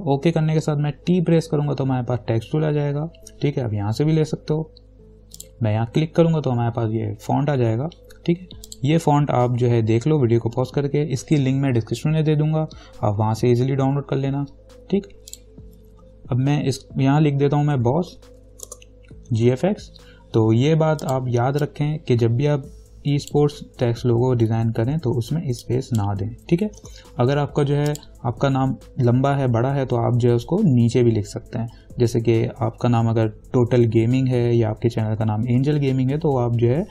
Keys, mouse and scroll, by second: 1.9 t, 5.6 click, 8.9 click, 15.5 click, 17.7-20.2 typing, 21.2-25.3 drag, 25.3 t, 25.8-28.1 drag.